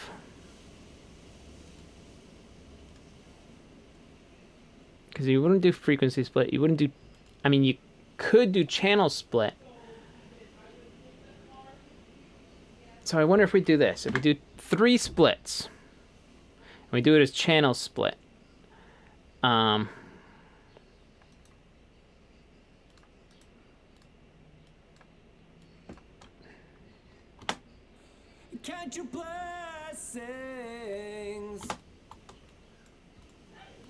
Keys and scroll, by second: 13.9 3, 14.1 Return, 31.7 space.